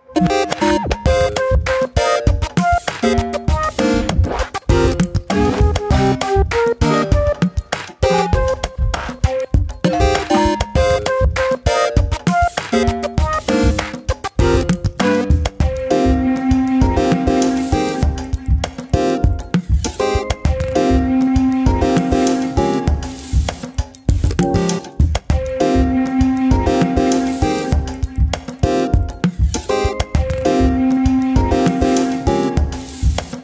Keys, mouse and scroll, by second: 0.8 ctrl+r, 2.2 click, 2.8 Delete, 3.3 scroll up 1, 4.7-6.0 drag, 6.4 click, 6.6 click, 8.2 click, 8.6-9.6 drag, 11.1 click, 11.5 click, 12.1 scroll down 1, 12.4 a, 12.7 middle click, 13.1-13.6 scroll up 2, 13.6 e, 15.7 click, 16.0 middle click, 16.7 click, 16.9 click, 17.2 Delete, 17.9 middle click, 18.6 shift+click, 19.0 Delete, 19.4 scroll down 1, 19.5 middle click, 20.2 click, 20.6 KP_7, 20.8 scroll up 1, 21.1 shift+middle click, 21.4 click, 22.0 click, 22.6 middle click, 23.3 click, 24.2 click, 24.7 KP_1, 25.2 middle click, 25.8 3, 26.0 click, 26.3 Delete, 26.9 middle click, 27.9 KP_7, 28.3-28.8 scroll up 1, 29.6 click, 29.9-30.6 scroll down 2, 30.2 Tab, 30.6 shift+middle click, 30.7 click, 31.7 click, 32.2 click, 32.4 click, 33.0 ctrl+s.